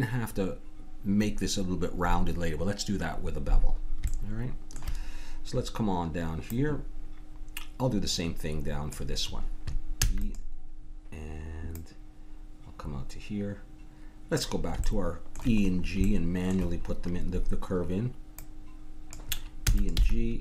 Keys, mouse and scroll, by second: 4.1-6.1 middle drag, 6.5-8.9 drag, 10.0 e, 11.7-14.3 drag, 14.8 middle click, 15.6 middle click, 17.1-18.4 middle drag, 18.4-20.3 drag, 19.6 e, 20.0 g.